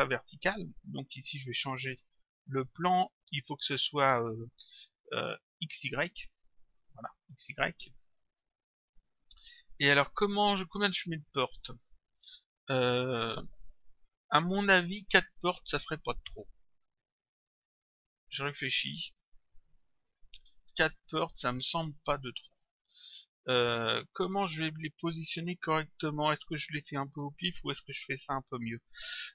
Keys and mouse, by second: 1.9 click, 6.1 click, 8.4 click, 11.7 click.